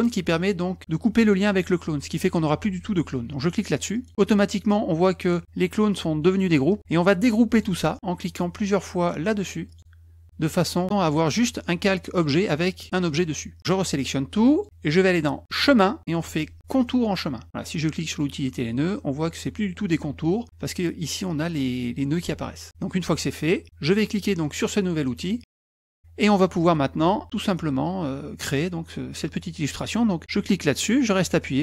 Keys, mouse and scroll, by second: 10.2 click, 13.1 click, 31.3-31.6 drag.